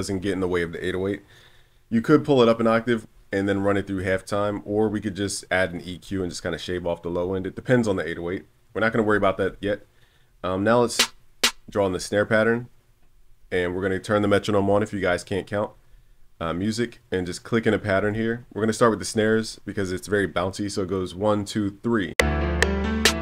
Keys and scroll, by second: 4.7 super+s.